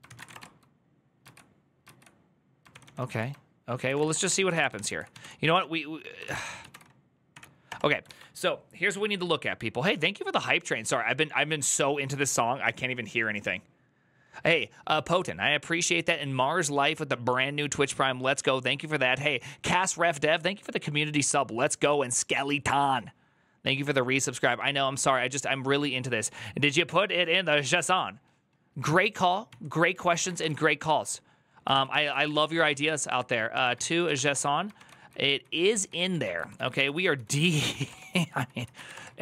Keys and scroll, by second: 0.0-0.7 typing, 1.0 ctrl+u, 1.6 ctrl+u, 3.5-6.5 typing, 6.0 ctrl+c, 7.1 Up, 7.5 Return, 7.9 alt+", 27.7 alt+{, 29.2 ctrl+t, 29.8-30.6 typing, 31.5 ctrl+t, 31.7 ctrl+n, 31.8-39.2 typing, 34.5 ctrl+d, 37.2 ctrl+c.